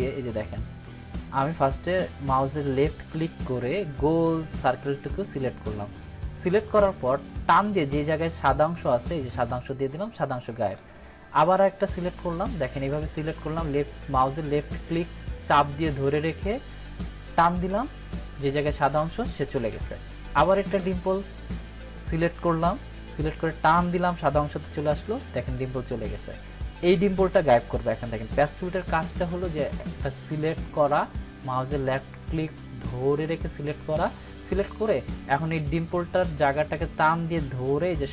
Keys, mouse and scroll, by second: 0.6-1.5 drag, 10.8 ctrl+d, 11.6-16.9 drag, 19.7 ctrl+d, 20.6-22.8 drag, 23.4-24.4 click, 25.5 ctrl+d, 29.5 click, 29.7-33.9 drag, 31.2-33.9 drag.